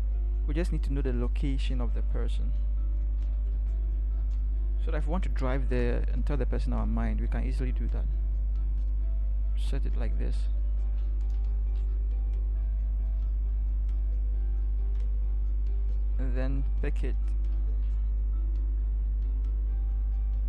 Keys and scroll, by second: 2.5 Up, 2.9 Up, 3.5 v, 3.7 Up, 4.1 Up, 11.4 t, 17.3 ctrl+c.